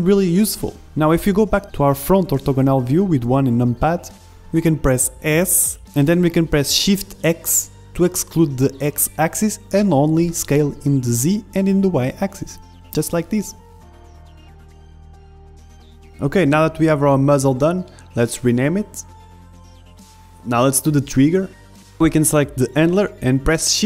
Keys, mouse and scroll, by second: 0.0 KP_1, 6.3 s, 12.5-15.4 middle drag, 15.4 KP_1, 16.1 z, 16.6 ctrl+z, 16.6 g, 17.6 z, 18.0-19.9 middle drag, 19.9 z, 20.3-23.8 middle drag.